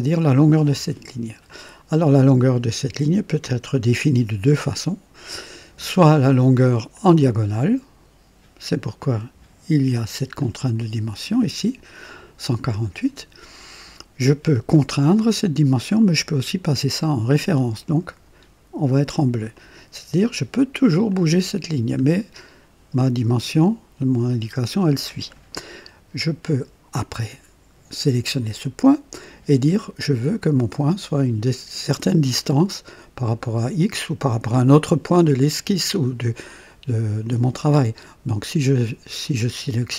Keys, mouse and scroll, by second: 1.4 click, 6.8 click, 10.3 click, 17.2 click, 19.4 click, 21.0-23.4 drag, 26.3 click.